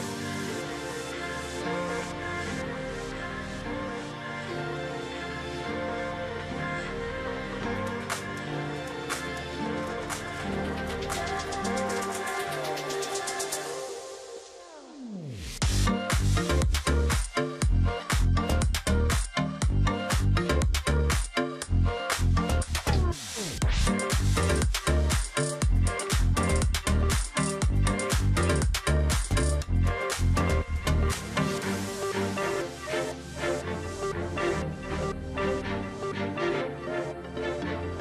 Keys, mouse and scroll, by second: 0.6 double click, 13.0 double click, 14.6 Delete, 17.0-17.7 alt+scroll up 1, 18.4 double click, 20.5 double click, 21.2 double click, 22.9 alt+click, 23.8 ctrl+z, 24.1 alt+scroll up 1, 24.5 alt+click, 25.5 alt+click, 26.9 alt+scroll up 1, 28.1 alt+scroll down 1, 28.2 alt+scroll up 1, 28.3 alt+scroll down 1, 28.4 alt+scroll up 1, 28.6 space, 29.0 alt+scroll up 1, 29.2 alt+click, 29.5 alt+scroll down 1, 29.6 space, 30.0 alt+scroll up 1, 30.3 alt+click, 30.6 alt+scroll down 1, 30.7 space, 31.1-31.6 alt+scroll up 1, 31.6 space, 33.3-33.8 alt+scroll up 1, 34.0 space.